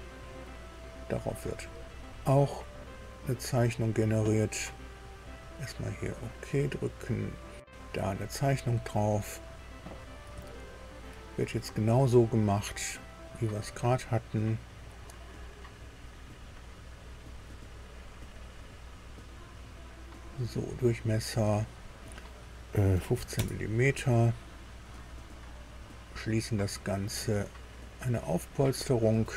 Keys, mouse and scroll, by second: 0.0 click, 2.0 click, 4.9 click, 9.0 click, 10.3 shift+middle click, 12.7 click, 13.6-14.0 scroll up 1, 15.4 click, 17.8 click, 19.2 click, 19.6 right click, 20.1 click, 21.7 click, 22.9 KP_1, 23.1 KP_5, 23.3 KP_Enter, 25.6 click, 28.0 click.